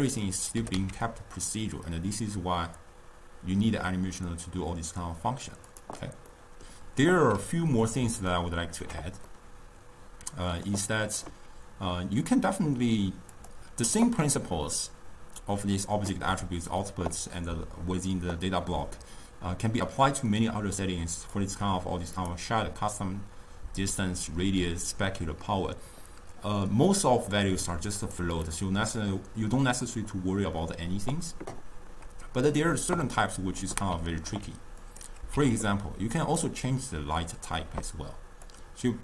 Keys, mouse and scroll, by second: 0.6 g, 6.4 middle click, 7.5-12.3 middle drag, 13.3 click, 21.3-25.3 drag, 28.1-31.6 drag, 33.3-34.9 middle drag, 34.9 click, 35.9 shift+d, 38.5 drag.